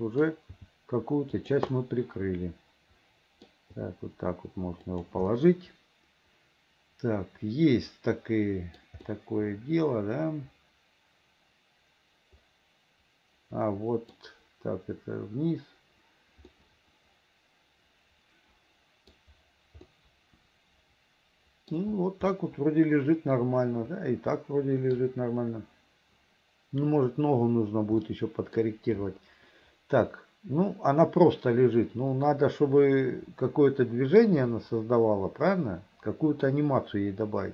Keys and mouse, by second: 0.7 g, 1.9-3.6 middle drag, 3.9 g, 5.4-9.0 middle drag, 9.2-14.3 middle drag, 16.8-19.3 middle drag, 20.0-21.9 middle drag, 22.4-25.2 middle drag, 28.3 middle click, 32.5-34.4 middle drag.